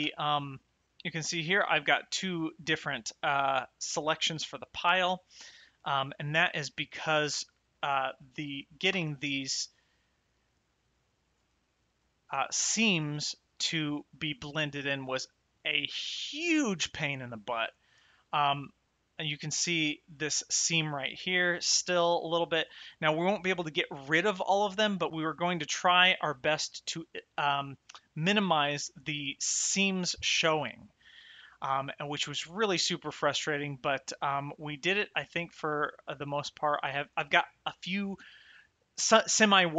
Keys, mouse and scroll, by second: 0.8 click, 2.6 click, 4.1 click, 7.2 shift+middle click, 8.2 click, 8.9 m, 11.1 click, 11.6 shift+middle click, 14.9 shift+right click, 18.0 shift+middle click, 19.8 middle click, 31.5 middle click, 34.3 shift+middle click.